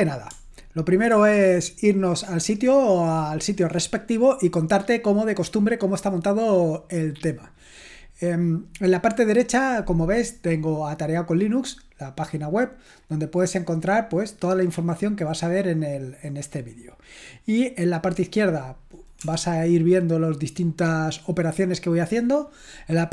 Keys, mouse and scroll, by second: 1.1 ctrl+1, 13.4-15.1 scroll up 1, 15.1-16.0 scroll up 1, 16.0-16.4 scroll up 1, 16.4-17.9 scroll down 1, 17.9-19.2 scroll down 1, 19.2 BackSpace.